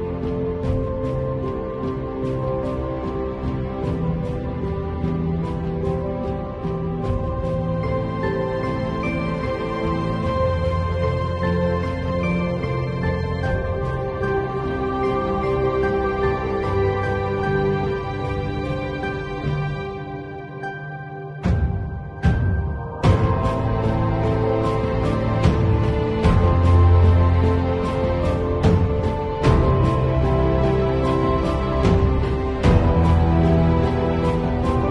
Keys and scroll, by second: 1.1 space, 2.6 space, 3.3 space, 6.3 space, 9.7 space, 10.5 space, 13.0 space, 14.8 space, 15.4 ], 16.1 space, 17.4 space, 21.7 space, 24.5 space, 25.6 space, 26.2 space, 26.7 space, 29.2 space, 31.4 space, 31.7 x, 32.6 x, 34.3 x.